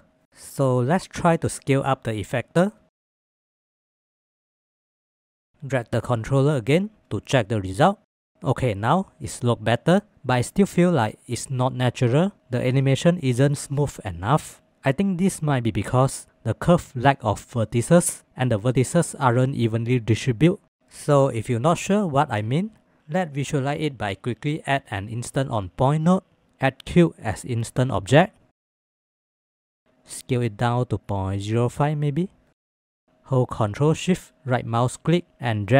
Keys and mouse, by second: 22.5 click, 26.4-29.3 drag.